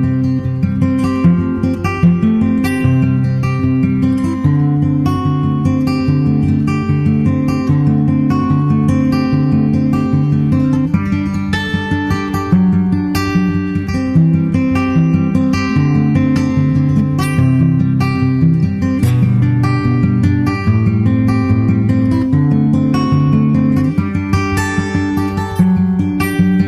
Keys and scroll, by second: 18.0 super+Tab, 18.2 super+Tab.